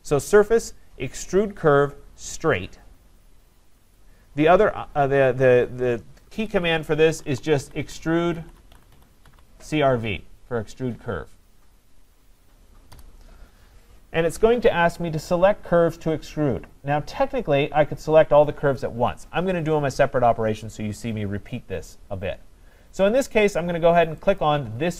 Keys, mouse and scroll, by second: 4.0 click, 6.4 Escape, 7.0-9.8 typing, 12.9 Return, 15.9-17.1 scroll up 4, 17.1-18.0 scroll down 3, 21.2 scroll down 1, 21.4 scroll, 22.1-22.5 scroll, 24.4 click.